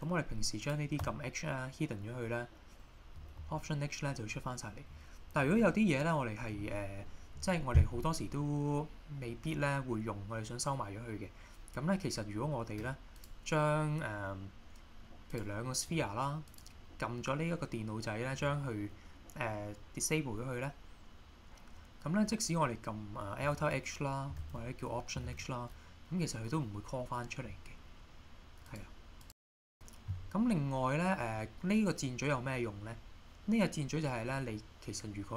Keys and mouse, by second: 0.6 click, 1.0 h, 3.4 alt+h, 15.3 click, 16.5 click, 23.5 alt+h, 24.4 alt+h, 28.7 click, 29.3 click, 33.6-34.0 middle drag, 34.3 middle click.